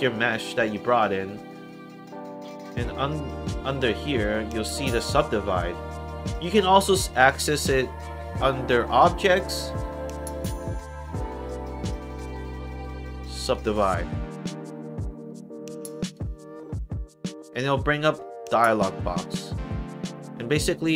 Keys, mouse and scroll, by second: 8.9 click, 13.3 click, 15.9 click, 18.4 click.